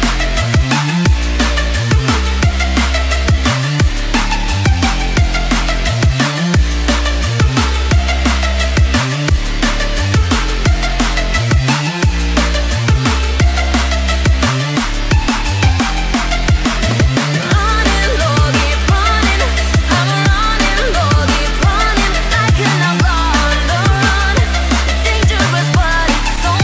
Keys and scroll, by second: 14.2 ctrl+0.